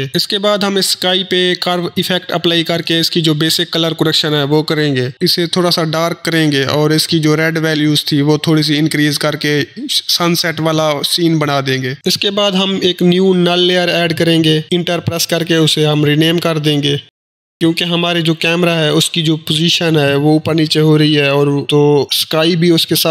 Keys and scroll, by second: 0.1 ctrl+space, 0.3-1.3 typing, 8.1 Delete, 14.7 Return, 14.9-17.4 typing.